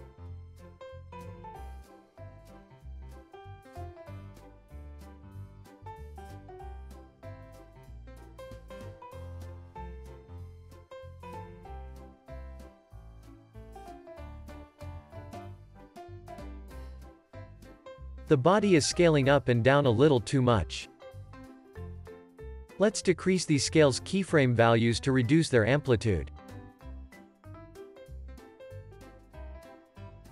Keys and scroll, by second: 10.3 super+s, 11.7 space, 18.8 space, 19.1 super+s, 27.0 z, 27.6 alt+shift+s.